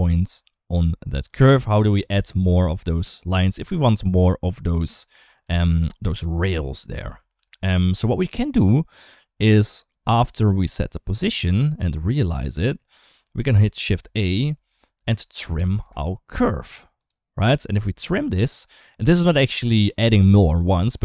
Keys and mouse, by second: 5.2-6.4 d, 5.4 click, 6.4 click, 6.7 d, 7.0 ctrl+z, 7.2 ctrl+z, 9.2 click, 10.4 click, 11.4 click, 11.5 click, 12.6 middle click, 13.6 shift+a.